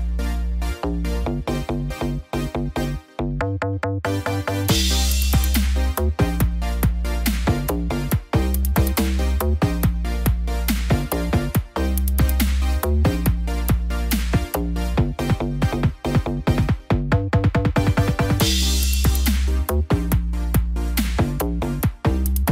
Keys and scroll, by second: 17.4 ctrl+=.